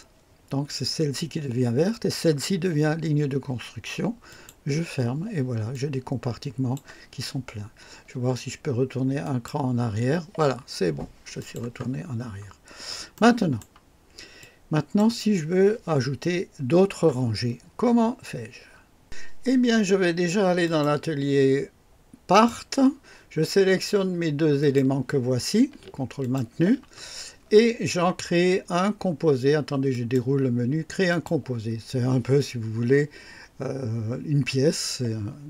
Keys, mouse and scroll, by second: 4.3 click, 5.7-6.9 drag, 9.2 click, 11.4 click, 12.0 scroll up 1, 12.6 scroll down 2, 13.1 right click, 14.4 click, 20.6 click, 22.3 click, 24.6 click, 26.2 ctrl+click, 29.9 click, 31.1 click.